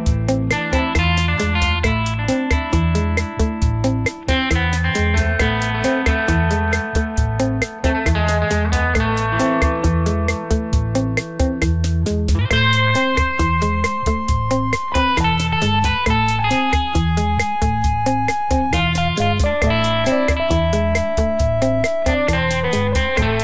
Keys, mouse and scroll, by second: 0.6 Tab, 0.8 right click, 1.2 click, 1.9 click, 3.0-3.8 scroll down 1, 3.8 click, 4.7 click, 5.9 scroll up 2, 6.4 n, 6.8 scroll up 1, 7.5 n, 8.1 click, 8.7 middle click, 12.1 middle click, 15.0 shift+middle click, 16.7 shift+middle click, 17.8 click, 18.2 n, 19.4 click, 19.8 click, 22.3 click.